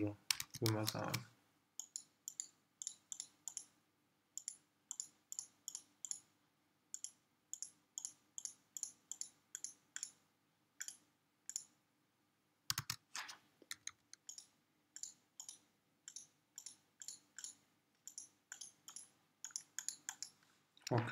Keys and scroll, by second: 0.8 alt+super+z, 12.9 super+z, 13.8 super+[.